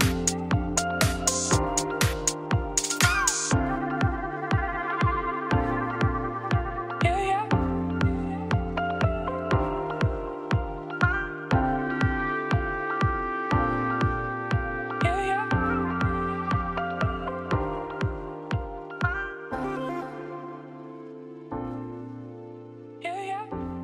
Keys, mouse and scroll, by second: 0.8 click, 1.3 KP_0, 2.0 click, 2.4 KP_0, 3.3 scroll up 1, 3.5 scroll down 2, 4.8 Tab, 5.3 scroll up 2, 5.5-6.0 scroll down 1, 7.2 KP_0, 8.1 Tab, 8.5 2, 8.6-11.0 alt+drag, 11.5 alt+shift+click, 12.3 click, 12.5 click, 12.9 Tab, 13.5 scroll down 3, 13.8-14.2 scroll up 4, 14.2-14.9 scroll down 2, 14.9 shift+middle click, 15.1-15.6 scroll up 2, 15.6 scroll down 1, 15.8 shift+middle click, 16.2-17.4 scroll up 1, 17.4-18.1 scroll up 1, 18.1-19.4 scroll up 1, 19.4 click, 19.6-20.0 scroll down 1, 20.0-20.3 scroll up 3, 20.3 click, 20.5 shift+middle click, 21.3 click, 21.6 click.